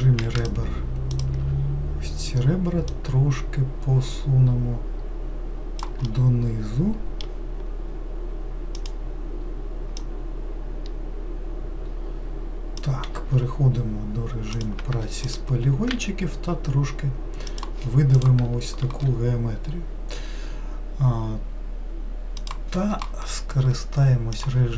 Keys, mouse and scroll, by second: 0.4 shift+click, 1.1 shift+click, 2.9 click, 6.1-8.7 middle drag, 8.7 click, 10.0 click, 13.1 3, 14.5 click, 15.2 shift+click, 15.9 e, 24.4 click.